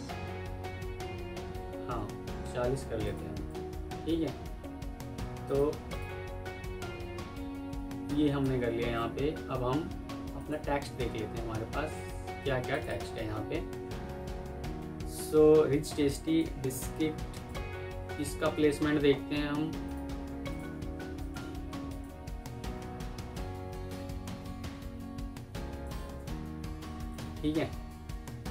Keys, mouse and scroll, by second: 3.4 double click, 6.6 F4, 7.6 F2, 8.4 Escape, 9.1 ctrl+s, 12.8 double click, 17.9 ctrl+c, 18.5 alt+Tab, 25.1 F2.